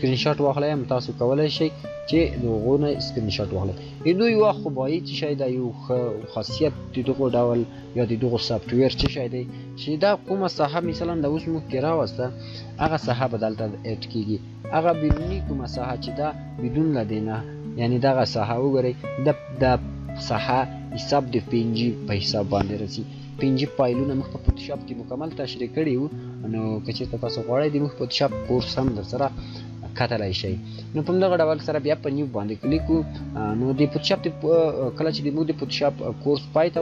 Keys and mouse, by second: 5.2 shift+click, 30.8 shift+click, 30.9 shift+click.